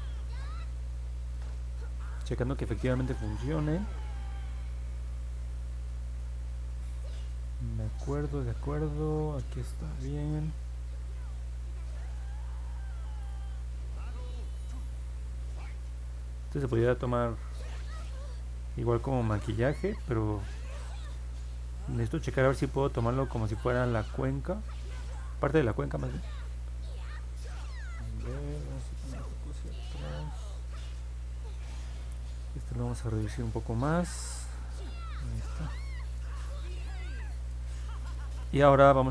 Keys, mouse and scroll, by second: 2.4 middle click, 3.6 scroll up 1, 4.8-6.1 alt+middle drag, 6.6 scroll up 1, 7.4 alt+middle click, 18.6 click, 19.1 click, 19.5 click, 19.9 click, 20.3 click, 20.7 click, 21.3 click, 21.7 click, 22.1 click, 22.5 click, 22.8 click, 23.2 click, 23.6 click, 24.0 click, 24.9 click, 25.3 click, 25.6 click, 26.5 click, 26.7 click, 27.6 click, 28.0 click, 29.0 click, 29.3 click, 29.7 click, 30.0 click, 30.4 click, 30.7 click, 31.0 click, 31.4 click, 31.8 click, 32.2 click, 32.6 click, 33.1 click, 33.4 click, 33.8 click, 34.2 click, 34.5 click, 35.9 scroll down 1, 36.5 alt+middle click, 37.4 scroll up 1, 38.2 alt+middle click.